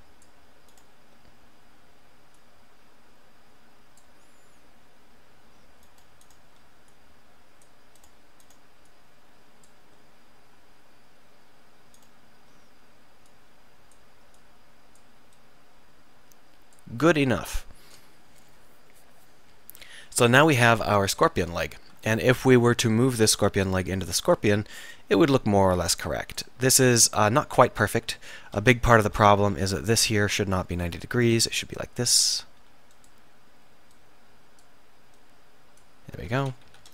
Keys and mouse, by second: 1.3-2.7 middle drag, 6.0-8.0 middle drag, 10.1 middle click, 10.6 middle click, 12.1 middle click, 13.4 middle click, 17.2 middle click, 20.4 KP_7, 21.2 a, 23.0 a, 28.2 a, 28.5 z, 29.2 b, 30.8 r, 32.7 r, 36.3 z, 36.5 a, 36.8 a.